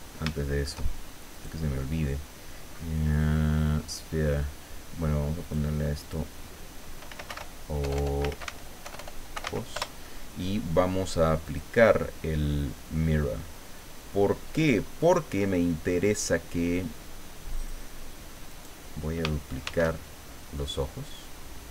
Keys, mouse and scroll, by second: 0.0-0.3 scroll up 1, 0.3 shift+middle click, 1.3 right click, 5.4 click, 6.0 click, 6.8-10.0 typing, 11.5 click, 17.6 click, 18.5 right click, 19.6 shift+d.